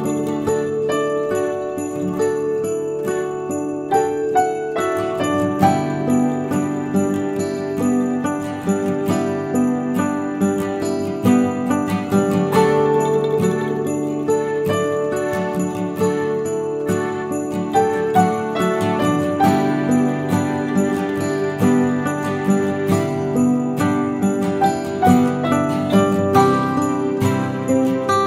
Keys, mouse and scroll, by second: 0.4 ctrl+a, 1.6 Tab, 2.2 alt+click, 2.8 ctrl+b, 9.9 Tab, 10.2-11.0 scroll up 4, 10.6 shift+middle click, 11.6 ctrl+z, 11.8 ctrl+z, 12.4 ctrl+b, 13.9 Tab, 14.6 ctrl+z, 14.9 ctrl+z, 15.9 alt+shift+click, 17.0 ctrl+b, 18.7 Tab, 18.9 scroll down 2, 19.2 shift+middle click, 19.6 scroll up 1, 19.8 click, 20.3 click, 21.1 click, 21.6 click, 22.6 Tab, 22.6 click, 23.8 ctrl+b, 25.2 middle click.